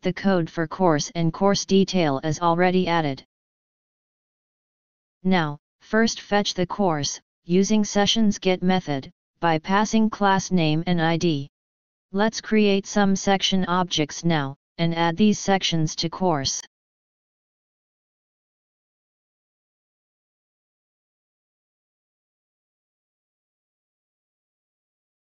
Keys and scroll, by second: 0.6 ctrl+shift+/, 20.7 End, 20.9 shift+Home, 21.1 ctrl+c.